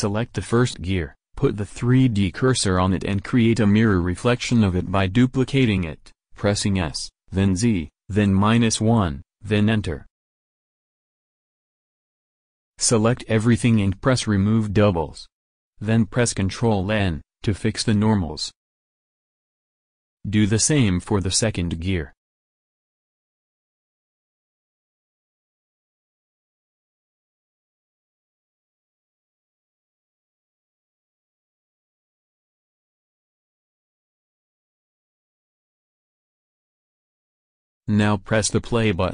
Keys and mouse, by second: 1.1 shift+s, 2.9 KP_1, 4.9 Tab, 5.4 a, 6.7 shift+d, 7.8 s, 11.9 a, 12.8 a, 14.0 click, 15.7 click, 16.2-17.2 drag, 17.2 ctrl+n, 19.7 Tab, 20.6 click, 21.5 ctrl+shift+v, 22.1 shift+s, 23.3 Tab, 25.6 b, 25.6 a, 27.1 shift+d, 28.4 s, 31.1 a, 31.6 a, 32.5 click, 34.9 ctrl+n, 36.3 Tab, 37.4-39.1 drag.